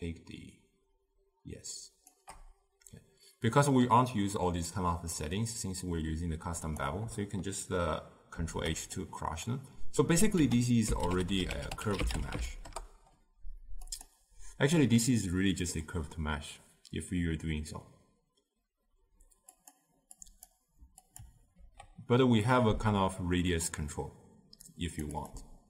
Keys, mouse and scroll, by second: 8.4 ctrl+h, 12.8 ctrl+a, 21.7 ctrl+h, 22.9-25.6 drag.